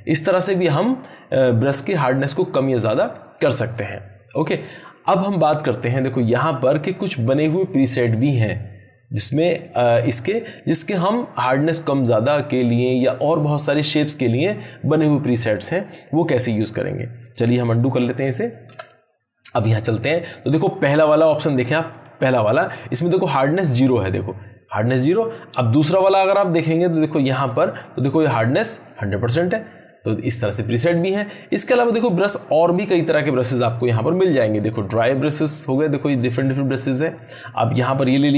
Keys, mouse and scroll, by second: 17.2 ctrl+Num_Lock, 17.5 ctrl+z, 19.7 click, 24.7-25.3 drag, 37.6-38.3 drag.